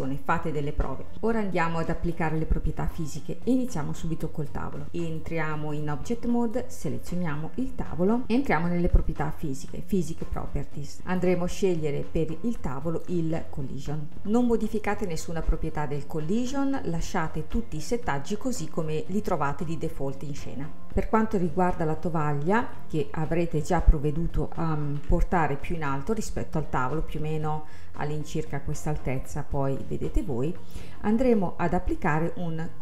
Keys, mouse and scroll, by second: 2.3-2.8 scroll down 3, 2.8-5.2 middle drag, 5.2-6.6 drag, 7.1 scroll down 3, 7.4 scroll up 2, 8.2 n, 10.3 click, 11.0 click, 11.8-12.8 scroll up 3, 12.8-13.9 drag, 13.9 scroll up 4, 15.8-17.1 scroll down 3, 17.1-18.7 scroll down 2, 18.7-20.1 scroll up 3, 22.8-25.1 middle drag, 25.1 KP_1, 29.3-32.4 middle drag.